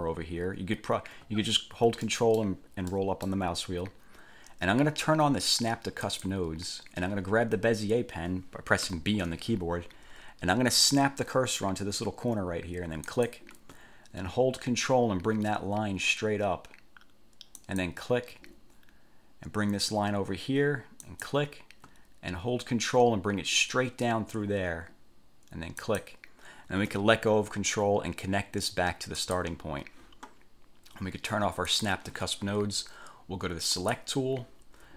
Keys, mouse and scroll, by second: 0.1-0.7 ctrl+scroll up 2, 1.4-1.7 ctrl+scroll up 2, 2.2 ctrl+click, 3.1 click, 6.2 click, 9.0 b, 13.2 click, 17.7 ctrl+click, 21.2 click, 25.9 ctrl+click, 29.4 click, 31.9 click, 33.9 click.